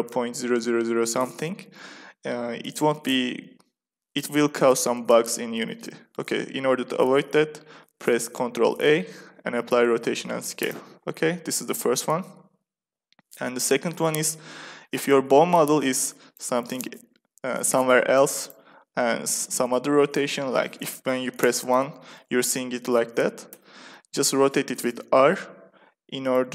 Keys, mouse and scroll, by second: 8.3 ctrl+a, 16.2-18.4 drag, 18.5 r, 21.6 KP_3, 23.4 KP_1, 24.0 r, 26.3-26.5 drag.